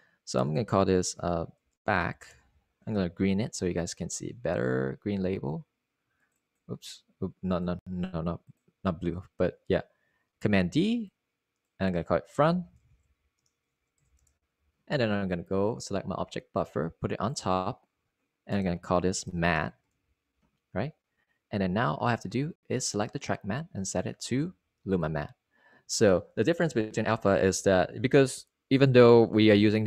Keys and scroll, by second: 3.1 Return, 4.1-5.3 typing, 13.2 super+d, 15.0-17.3 typing, 21.2 Return, 21.7-22.8 typing.